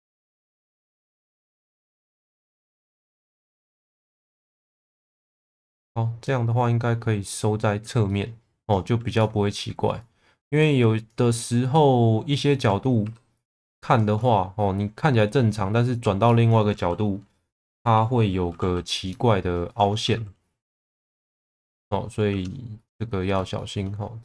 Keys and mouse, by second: 0.3 click, 0.9 2, 1.0 click, 1.4 alt+middle click, 2.7 click, 4.2 1, 5.4 click, 8.0 middle click, 8.6 click, 9.1 alt+middle click, 13.0 2, 13.9 shift+click, 16.2 shift+middle click, 18.5 f, 18.9 click, 20.1 f, 20.8 click, 21.4 shift+click, 21.6 f, 22.3 1, 22.7 click, 23.5 shift+middle click.